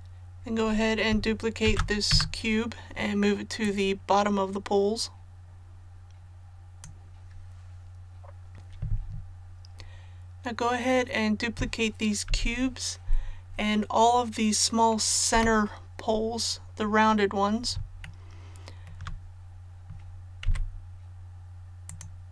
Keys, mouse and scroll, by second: 1.7 shift+d, 3.6-7.7 drag, 12.3 i, 15.3 KP_7, 16.7 scroll up 1, 18.0 shift+middle click, 20.4 c, 21.9-22.3 drag.